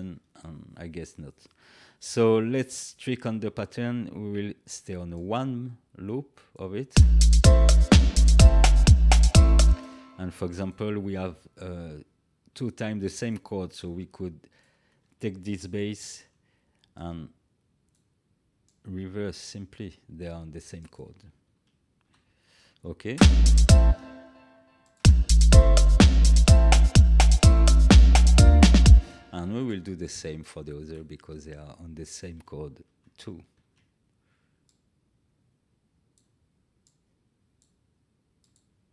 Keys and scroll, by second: 6.9 space, 9.6 space, 15.9 ctrl+x, 22.0 ctrl+v, 23.1 space, 28.8 space, 33.4 ctrl+x.